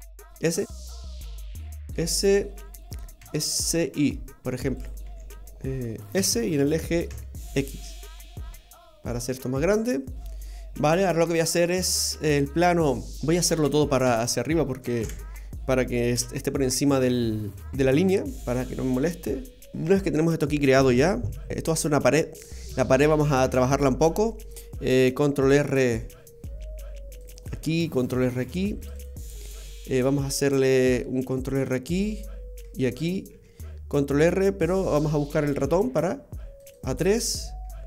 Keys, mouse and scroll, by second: 0.1 s, 3.1 s, 5.1 y, 6.1 s, 11.2-11.7 scroll down 1, 11.9 middle click, 12.3-13.2 scroll down 2, 12.7 middle click, 14.0 a, 15.0 KP_3, 16.1 KP_1, 17.7 g, 21.5 shift+middle click, 22.4-23.5 scroll down 1, 23.5 scroll down 1, 23.6 Tab, 25.5 ctrl+r, 28.4 ctrl+r, 30.2 ctrl+r, 33.3 ctrl+r.